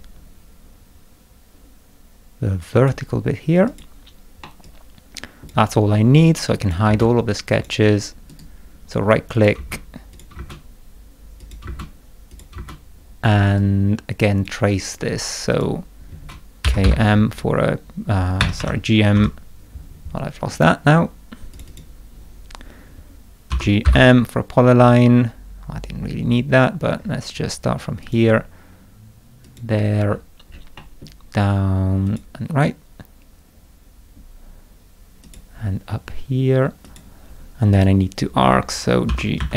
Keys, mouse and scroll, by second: 3.7 click, 4.4 middle click, 4.6 click, 6.6 click, 6.9 space, 7.5 click, 8.3 right click, 9.3 click, 9.6 space, 10.1 click, 10.3 space, 11.4 click, 11.6 space, 12.3 click, 12.5 space, 13.4 middle click, 13.6 click, 15.5 click, 16.4-17.3 typing, 18.4 Escape, 18.6 Escape, 19.1 g, 20.5 click, 21.5 click, 21.7 click, 23.5 g, 23.8 m, 24.7 scroll up 2, 27.0-27.6 scroll up 4, 28.0 click, 29.4 click, 30.0-30.7 scroll down 4, 30.8 middle click, 32.1 click, 35.2 click, 36.8 click, 37.7 right click, 39.1 g, 39.4 a.